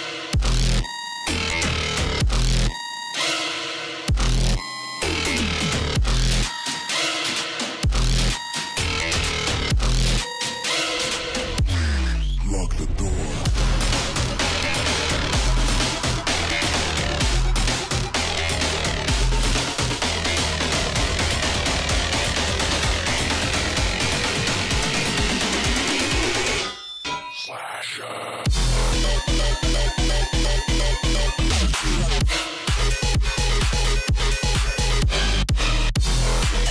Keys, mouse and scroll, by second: 4.9 ctrl+shift+], 5.3-6.7 drag, 6.7-8.6 alt+shift+drag, 8.6 alt+scroll up 1, 8.8-15.5 drag, 15.5-16.8 drag, 17.5-18.1 alt+scroll down 1, 18.9-21.7 drag, 21.7 ctrl+z, 22.0-23.6 drag, 23.6 ctrl+f, 24.4 ctrl+g, 24.8 click, 25.8 ctrl+g, 26.3-27.4 drag, 27.4 alt+scroll down 1, 28.1-29.8 drag, 29.8-30.9 drag, 30.9 alt+scroll up 1, 31.4-36.7 drag.